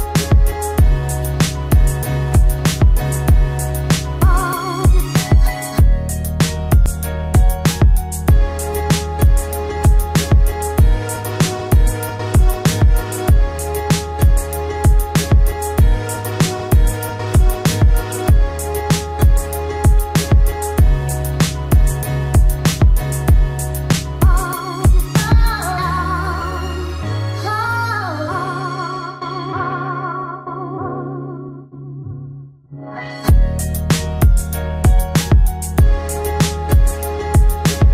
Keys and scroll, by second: 7.1 ctrl+alt+z, 12.5 ctrl+alt+z.